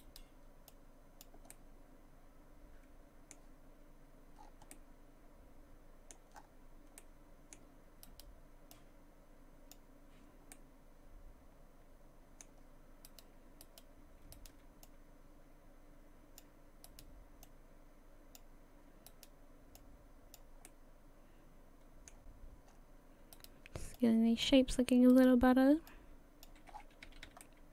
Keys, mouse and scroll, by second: 0.0 right click, 0.7 click, 1.5 middle click, 4.4 scroll down 6, 4.7 middle click, 6.4-7.0 scroll up 5, 7.0 middle click, 8.1 right click, 8.7 click, 10.5 middle click, 13.1 right click, 14.2 right click, 14.3 shift+right click, 14.6 shift+right click, 14.9 click, 16.9 right click, 17.4 click, 19.1 right click, 19.8 click, 20.7 middle click, 22.7 scroll up 3, 23.3 right click, 23.9 click, 25.1 right click, 25.9 click, 26.7 scroll down 6, 27.1 a, 27.3 a.